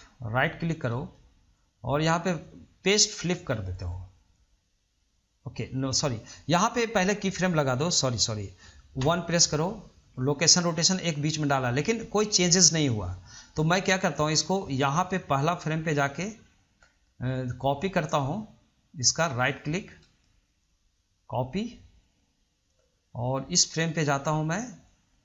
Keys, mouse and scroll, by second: 1.1-14.0 right drag, 14.0-16.2 drag, 17.0 middle click, 17.5 scroll up 1, 17.7-18.1 middle drag, 18.1 scroll down 2, 18.4-20.2 middle drag, 20.2-23.3 right drag, 23.3-25.2 drag.